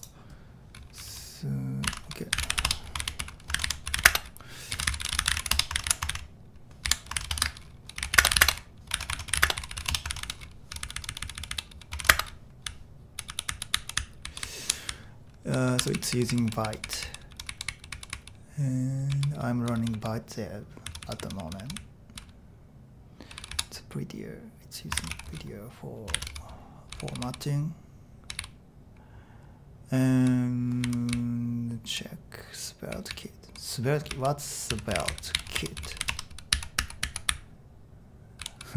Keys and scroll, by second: 1.9 ctrl+c, 2.1-21.8 typing, 23.3 typing, 25.1 typing, 26.3-29.3 typing, 30.6-32.0 typing, 34.1-38.7 typing.